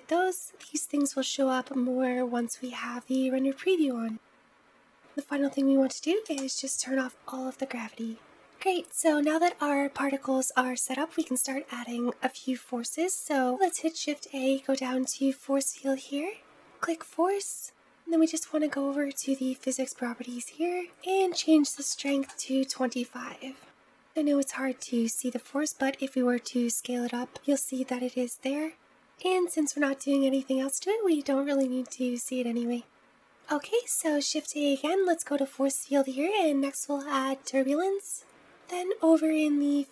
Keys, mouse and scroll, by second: 4.3-5.0 scroll down 7, 5.0-8.2 drag, 13.4 shift+a, 19.4 click, 20.8-23.6 drag, 25.0 middle click, 25.0-26.4 scroll down 3, 26.4 s, 33.5 shift+a.